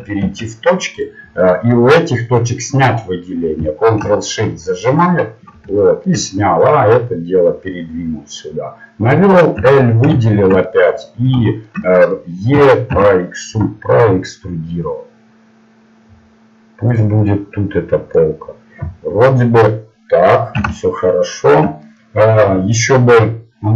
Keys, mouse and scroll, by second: 1.0 ctrl+Tab, 5.0-8.3 drag, 9.6 l, 10.4 middle click, 12.5 e, 17.2-18.6 middle drag, 18.8 middle click.